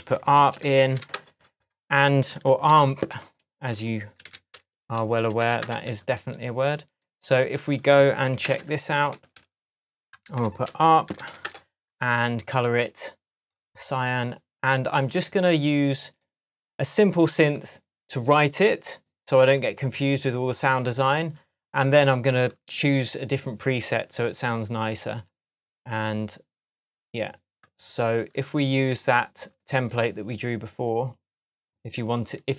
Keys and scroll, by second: 0.3 shift+super+a, 0.6 shift+r, 2.7 super+r, 4.2 super+r, 4.7 super+Right, 5.2 Left, 5.4 Delete, 5.6 Return, 8.4 shift+super+m, 9.1 shift+super+Tab, 9.6 shift+Tab, 10.4 super+r, 10.8-11.7 typing.